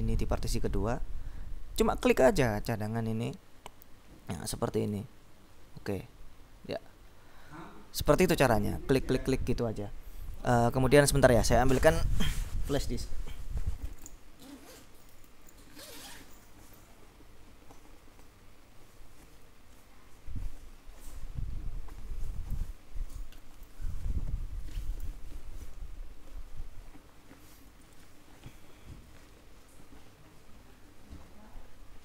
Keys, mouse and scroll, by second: 0.4 click, 2.4 click, 4.6-6.4 scroll down 6, 6.4-7.8 scroll up 3.